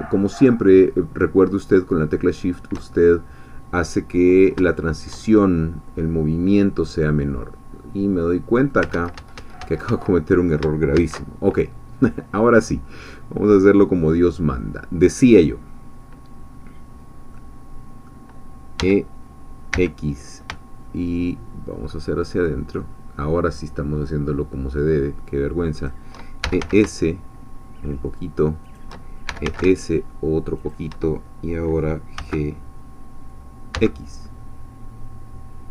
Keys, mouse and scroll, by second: 2.4 shift+click, 2.9-8.8 shift+middle drag, 8.9 ctrl+z, 10.9 ctrl+shift+z, 17.3-18.8 middle drag, 18.8 e, 19.7 x, 25.8 shift+click, 26.2-27.1 typing, 28.6 shift+click, 29.0-30.0 typing, 30.6 shift+click, 32.2 g, 33.7 x.